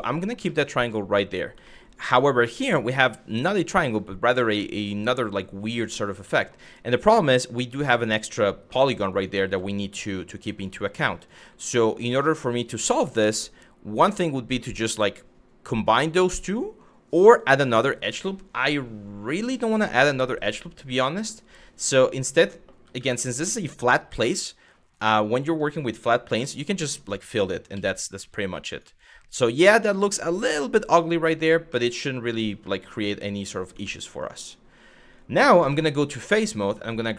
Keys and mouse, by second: 0.1 middle click, 1.3 middle click, 6.0 shift+middle click, 7.6 click, 8.4 1, 8.8 click, 9.1 g, 9.7 click, 10.2 click, 10.5 g, 10.8 click, 11.7 click, 20.7 shift+middle click, 21.7 click, 22.6 w, 23.5 w, 23.8 2, 26.0 f, 27.3 z, 28.4 click, 31.4 middle click, 32.2 middle click, 33.5 shift+middle click, 35.3 3, 37.0 click.